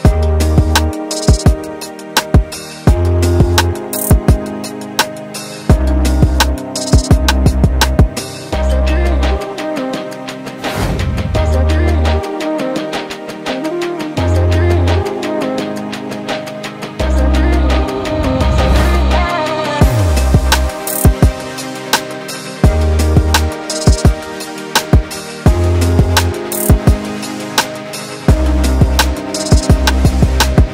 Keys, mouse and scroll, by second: 0.1 click, 0.3 Tab, 1.3-2.5 middle drag, 2.5 Tab, 3.7 Tab, 5.1 click, 6.2 ctrl+z, 7.5 Delete, 7.9 Tab, 8.5 alt+a, 8.8 scroll down 1, 9.0 middle click, 9.9-10.5 scroll up 2, 10.5 Tab, 11.7 click, 12.8 scroll down 1, 13.6-19.8 shift+middle drag, 19.8 click, 23.7 scroll up 1, 23.9 Tab, 24.7 scroll down 1, 25.0-26.5 middle drag, 26.5-27.0 scroll up 2, 27.0-28.3 middle drag, 28.3 ctrl+z, 28.6 ctrl+z, 30.0 middle click.